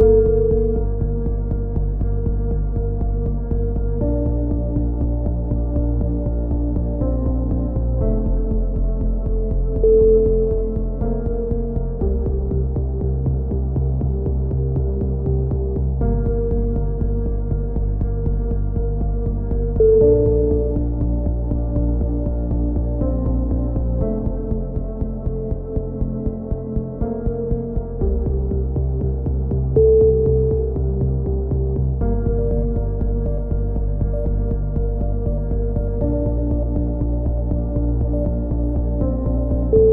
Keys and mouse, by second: 0.0 a, 0.2 z, 0.7 Tab, 2.2-3.4 drag, 5.5-7.0 drag, 8.3-10.0 drag, 11.4 Tab, 15.0 z, 15.8 z, 16.3 z, 16.7 z, 17.1-18.2 drag, 19.3 ctrl+r, 20.1 z, 21.3-22.4 drag, 21.8 x, 23.2-25.0 drag, 23.4 z, 23.8 z, 25.4 z, 26.6 click, 26.8 k, 30.1-31.7 drag, 31.0 x, 32.1 middle click, 32.8 Tab, 33.0 Tab, 33.8 click.